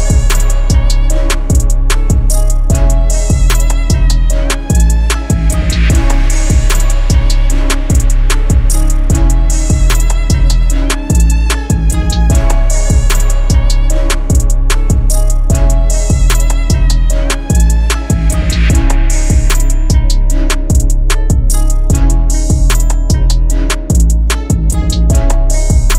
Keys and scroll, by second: 24.4 ctrl+g.